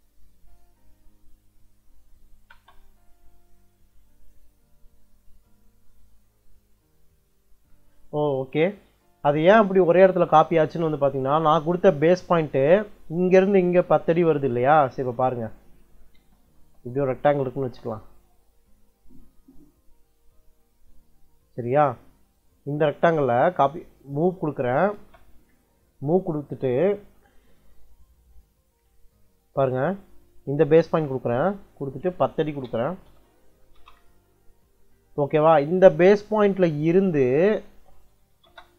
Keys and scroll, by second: 2.4 space, 6.9 Escape, 14.5 Escape, 15.8-17.4 typing, 24.2 m, 24.8 space, 32.1-33.4 typing, 33.6 Return, 37.3 Escape, 38.1 u, 38.3 space.